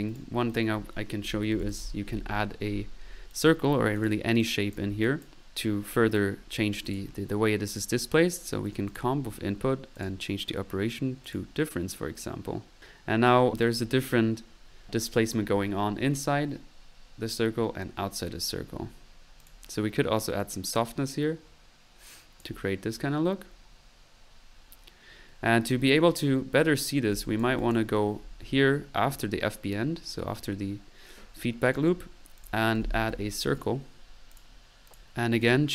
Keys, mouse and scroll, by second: 0.1 click, 0.2 right click, 1.3-2.3 typing, 3.3-3.8 drag, 4.2 click, 4.7 click, 5.2 click, 6.9 click, 7.7 click, 8.1-8.4 drag, 8.9 click, 9.9 click, 19.4 click, 27.1 click, 27.3-27.9 drag, 28.2-28.6 middle drag, 31.7-32.1 right drag, 32.4 click, 32.9-34.0 typing, 33.1 click, 34.3 click, 35.4 drag.